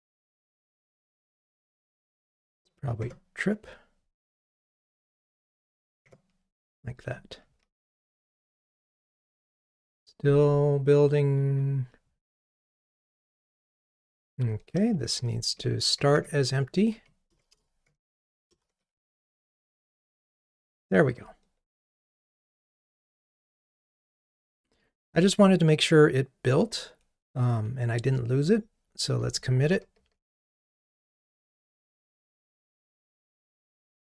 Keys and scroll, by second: 8.2 ctrl+r, 19.6 ctrl+r, 29.6 super+k.